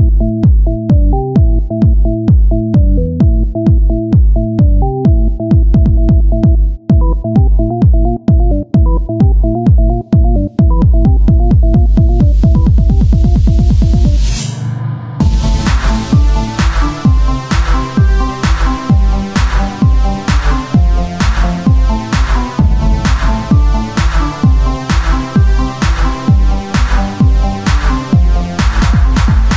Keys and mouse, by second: 2.1 e, 5.7 e, 5.7 r, 6.5-8.0 drag, 6.9 s, 8.0 e, 9.2 e, 9.7 s, 11.8-13.6 right drag, 13.6 c, 15.0 s, 16.1-18.2 drag, 18.2 c, 19.8 e, 22.0 e, 23.0 z, 23.2 middle click, 24.0 Tab, 24.6-25.8 drag, 25.5 KP_1, 26.2 z, 27.9 Tab.